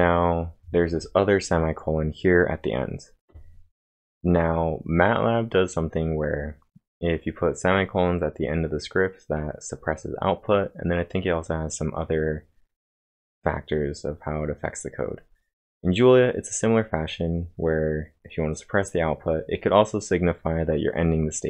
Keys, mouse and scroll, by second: 0.0-0.7 typing.